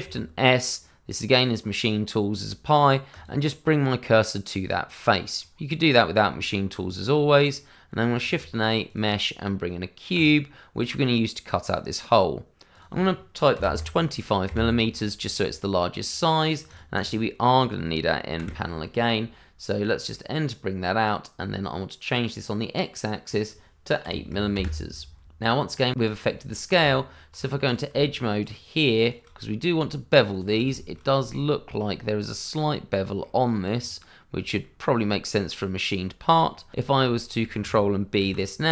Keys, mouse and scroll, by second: 0.0 shift+s, 3.1 click, 3.6 middle click, 6.2 Tab, 7.1-7.5 scroll down 1, 7.5 middle click, 8.2 shift+a, 8.8 click, 12.7 click, 13.5 KP_2, 13.7 KP_5, 14.4 KP_Enter, 16.6 click, 17.0 double click, 18.4 n, 19.8 middle click, 23.2 click, 24.0 KP_8, 24.5 KP_Enter, 25.2 click, 26.1 scroll up 1, 26.7 Tab, 27.6 click, 28.4 shift+click, 29.4 middle click, 30.3 shift+click, 30.7 shift+middle click, 31.5 middle click, 32.0-32.6 scroll up 1, 32.7 shift+middle click, 32.8 middle click, 32.9 shift+middle click, 33.7-34.4 scroll down 1, 34.6 shift+middle click, 34.7 middle click, 35.0-35.8 shift+scroll up 2, 35.8-36.1 scroll down 1, 36.5 middle click, 37.1 shift+middle click, 37.5 middle click, 38.1 click, 38.2 ctrl+b.